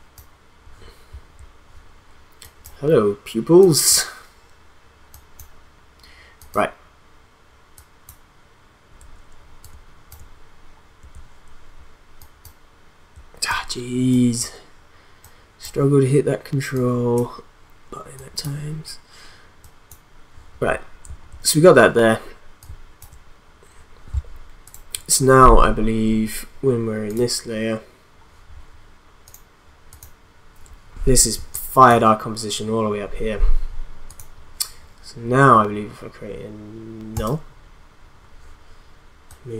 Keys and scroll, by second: 31.4 space.